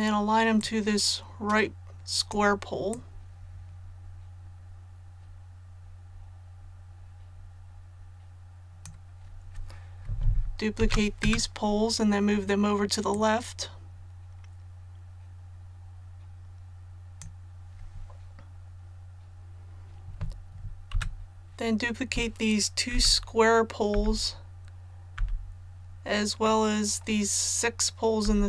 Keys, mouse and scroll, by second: 0.6-9.8 drag, 10.8 shift+d, 13.1-17.7 drag, 20.9 a, 22.9-23.9 typing, 26.4 middle click, 28.2-28.4 typing.